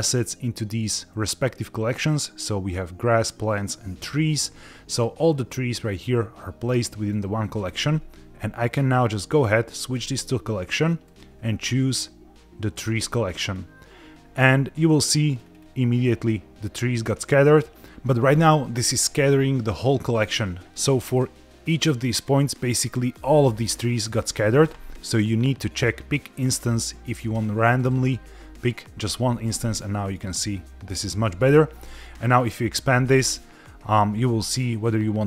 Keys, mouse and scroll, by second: 4.8 click, 7.0 click, 10.0 click, 11.0-13.6 drag, 14.9 middle click, 15.4-16.5 scroll down 2, 16.5-17.2 scroll down 2, 17.2-17.9 scroll up 1, 22.1 click, 24.0 click, 27.8 click, 29.5-31.0 middle drag, 31.7-32.3 scroll down 2, 32.3 click, 32.8-35.2 scroll down 4.